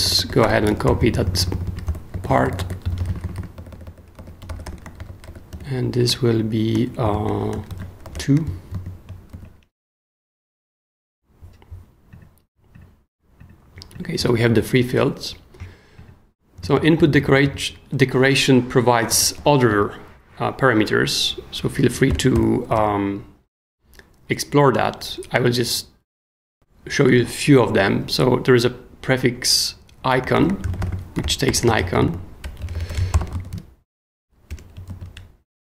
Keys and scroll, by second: 0.0-6.0 typing, 7.0 shift+m, 7.5 alt+shift+m, 7.7 alt+shift+Left, 8.0 alt+shift+t, 8.1 shift+o, 8.7 shift+super+o, 9.3 shift+super+s, 17.0 super+k, 18.8-20.2 typing, 22.1-23.7 typing, 25.6 Down, 26.5 Return, 30.1-34.0 typing, 34.5 Return, 34.9 super+s.